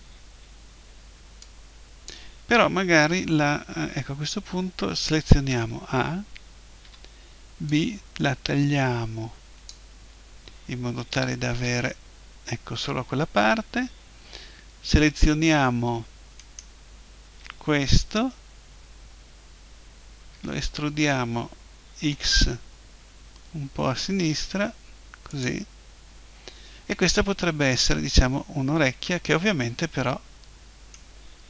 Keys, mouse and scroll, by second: 1.4-3.3 drag, 5.5 a, 6.9 b, 11.1 Delete, 16.4-18.4 right drag, 20.4 e, 25.4-27.4 drag, 27.4-29.6 middle drag.